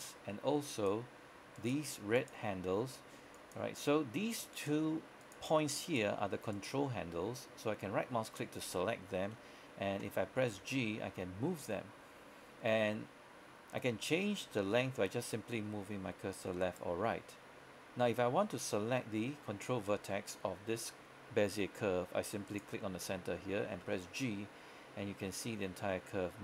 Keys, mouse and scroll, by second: 10.6 g, 16.7 right click, 23.9 g.